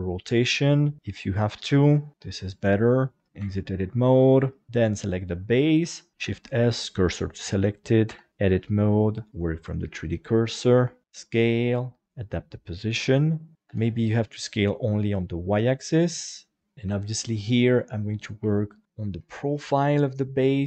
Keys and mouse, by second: 1.8 click, 2.1 middle click, 3.4 Tab, 3.7 middle click, 4.5 shift+middle click, 5.3 right click, 6.1 shift+s, 8.1 Tab, 9.3 click, 10.8 KP_1, 11.0 s, 12.1 click, 13.5 s, 13.7 y, 16.6 click, 16.9 Tab, 18.2 right click, 18.4 KP_1, 19.2 g.